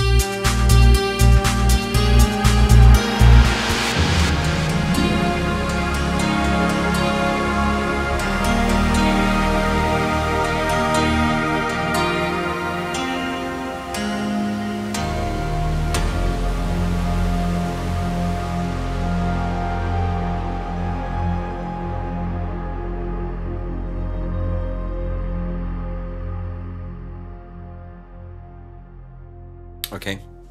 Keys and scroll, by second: 22.5 shift+Down, 23.3 shift+Up, 24.2 super+Down.